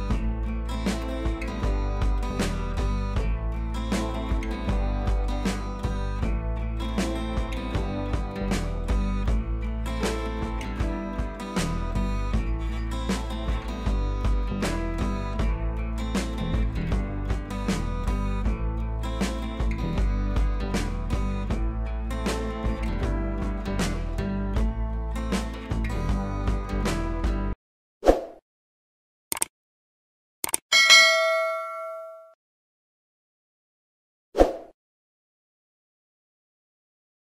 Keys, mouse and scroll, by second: 0.3 click, 1.0 b, 2.4-8.6 drag, 8.8 scroll down 1, 10.2 scroll up 1, 10.5-12.5 alt+drag, 12.5 scroll down 1, 12.7 scroll up 1, 13.0-17.0 drag, 17.0 ctrl+t, 17.6-21.2 alt+drag, 21.2-22.2 scroll up 1.